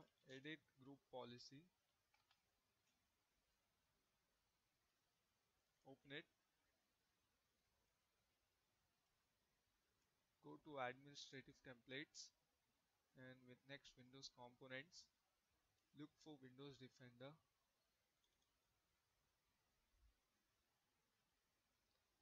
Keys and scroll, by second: 0.0-1.9 typing.